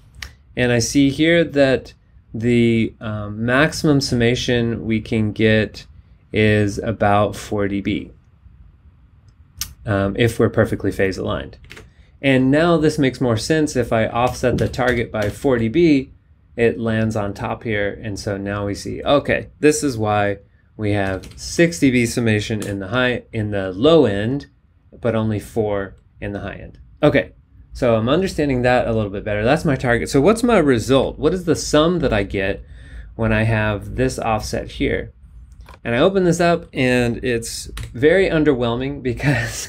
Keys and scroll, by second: 12.1 super+Tab, 14.3 super+Down, 21.0 super+Down, 22.6 y, 30.9 b, 37.7 b.